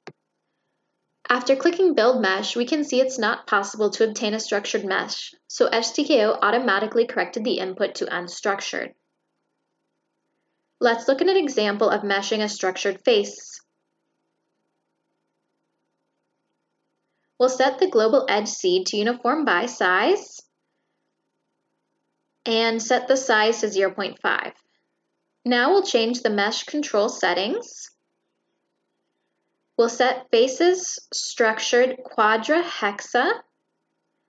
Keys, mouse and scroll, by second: 10.9 shift+middle click, 12.7 click, 13.0 click, 14.0 click, 14.2 click, 16.7 click, 17.3 click, 17.8 click, 18.4 click, 19.0 click, 19.6 click, 19.9 click, 20.3 click, 21.6 click, 22.3 click, 23.5 click, 24.8 click, 26.7 click, 27.1 middle click, 28.6 click, 29.1 click, 30.2 click, 31.0 click, 32.2 click, 33.6 click.